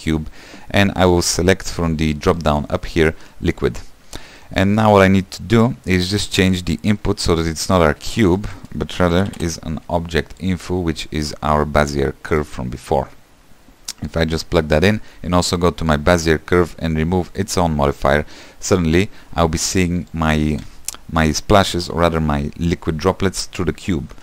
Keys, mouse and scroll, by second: 10.6 shift+a, 12.1 click, 14.2-16.1 drag, 17.6-20.3 drag.